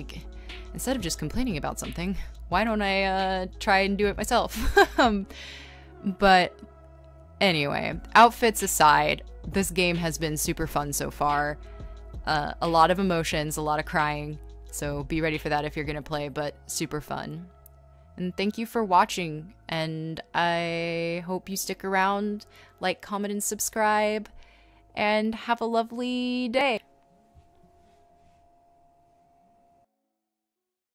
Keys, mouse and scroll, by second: 2.8 scroll, 11.6 space, 18.3 e.